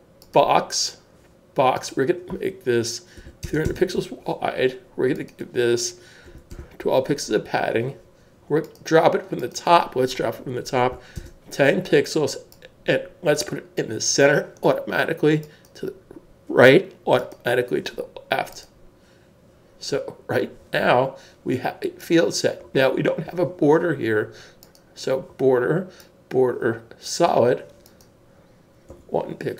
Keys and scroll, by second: 3.2-3.8 typing, 6.2 typing, 7.8 typing, 10.8-11.8 typing, 28.9 1.